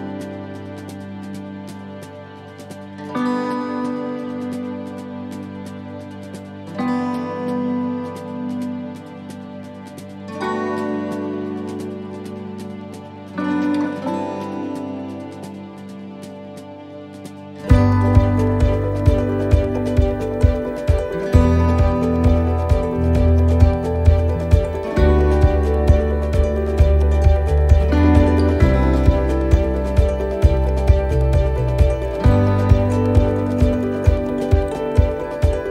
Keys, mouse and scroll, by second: 2.4 s, 4.2 middle click, 4.7 scroll down 2, 4.8 middle click, 6.8-7.2 scroll up 2, 7.1 middle click, 7.7 shift+middle click, 8.2 middle click, 8.7 shift+middle click, 11.2 u, 23.8 scroll down 3, 25.0 click, 26.6 click, 30.0 click, 30.6 a, 32.5 click, 35.0 click, 35.4-35.7 scroll down 2.